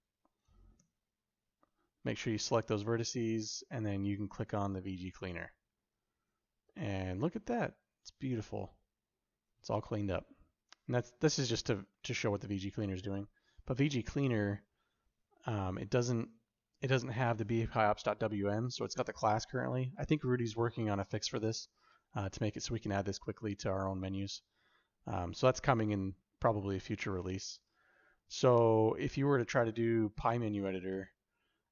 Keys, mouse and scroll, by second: 0.6 1, 4.7 click, 5.8 alt+z, 6.8-9.9 shift+middle drag, 11.8 middle click, 29.3-31.7 right drag.